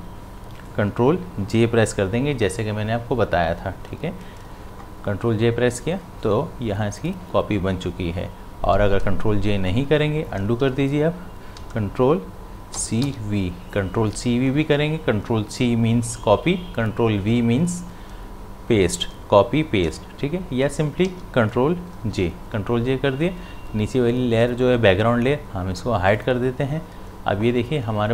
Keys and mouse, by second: 4.5 ctrl+j, 9.2 ctrl+j, 10.6 ctrl+z, 12.7 ctrl+c, 13.0 ctrl+v, 21.0 ctrl+v, 21.1 ctrl+z, 22.0 ctrl+j, 26.2 click.